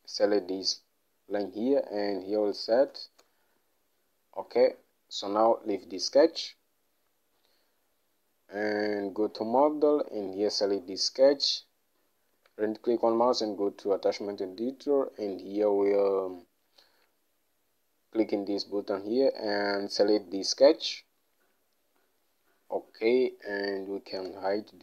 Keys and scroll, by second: 2.8 3, 3.0 0, 3.3 Return.